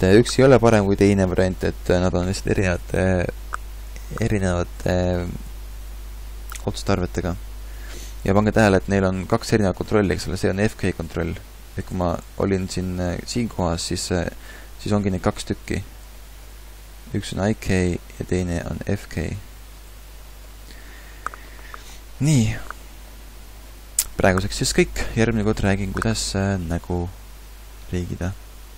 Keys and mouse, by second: 10.1 g, 12.0 ctrl+z, 12.2 ctrl+z, 12.6 ctrl+z, 17.0 g, 18.7 g, 22.6-23.3 typing.